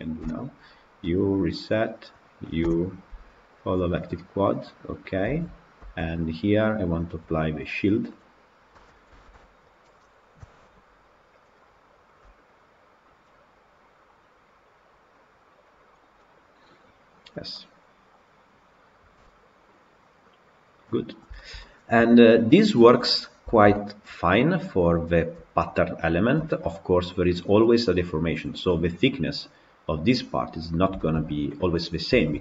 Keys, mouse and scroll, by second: 1.8 u, 4.8 u, 5.3 Tab, 5.8 Tab, 7.0 click, 8.3 click, 8.8 Tab, 9.0 shift+middle click, 9.7 click, 10.3 KP_Decimal, 15.6 click, 16.1-20.4 middle drag, 20.9 scroll down 2, 21.2-22.7 shift+middle drag, 22.7-23.3 scroll up 3, 23.3-27.3 shift+middle drag, 27.3-27.7 scroll up 1, 27.7-28.2 middle drag, 28.2-28.6 scroll up 1, 28.6-29.1 middle drag, 29.1-30.9 scroll up 1, 30.9-32.4 shift+middle drag.